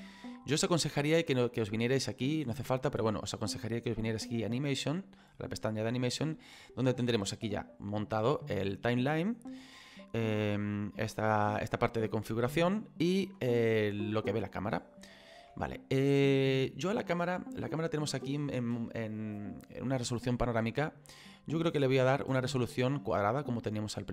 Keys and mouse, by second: 3.8 click, 11.5 middle click, 21.2 click, 23.6 click.